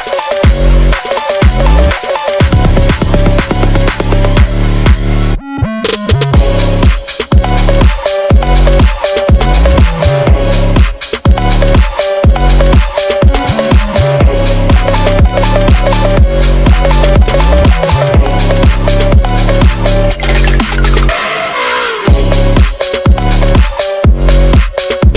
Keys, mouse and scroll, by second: 0.0 r, 0.4 click, 1.2 r, 1.6 click, 1.8 r, 2.6 click, 2.8 r, 3.8 g, 4.3 click, 4.6 ctrl+z, 4.8 g, 5.7 r, 6.3 r, 6.9 g, 7.8 click, 8.8 click, 10.7 ctrl+s, 10.8 click, 11.0 click, 11.1 scroll down 3, 11.2-12.2 scroll up 2, 12.2 scroll up 1, 12.3-12.9 scroll down 5, 12.6 /, 12.9 s, 13.4 click, 13.7 scroll up 3, 14.1 e, 14.7 ctrl+z, 14.8 i, 15.2 e, 15.8 click, 16.3-20.3 typing, 17.4 click, 18.1 ctrl+z, 20.8 click, 21.1 Tab, 21.3 click, 21.4 Tab, 21.5 click, 21.8 e, 22.1 s, 22.5 click, 22.7 click, 23.1 g, 23.7-24.0 drag, 24.0 ctrl+z, 24.1 ctrl+z, 24.6 s.